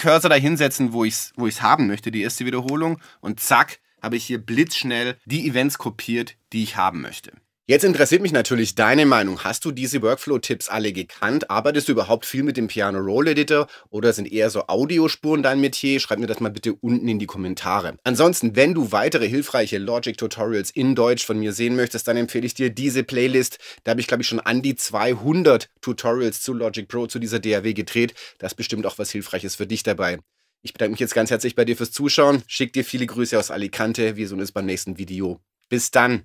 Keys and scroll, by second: 2.7 super+r.